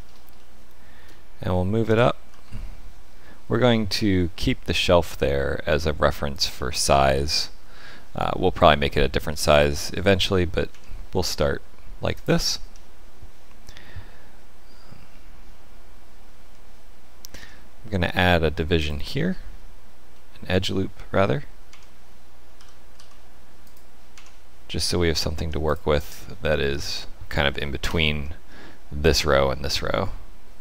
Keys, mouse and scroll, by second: 0.3 shift+middle click, 1.8 g, 7.0-7.5 scroll up 4, 7.7 shift+middle click, 9.5 shift+middle click, 10.6 Tab, 12.1 click, 17.2 ctrl+r, 20.1 shift+middle click, 21.6 Tab, 22.5 g, 24.0 Tab, 25.6 click, 27.7 ctrl+KP_Add.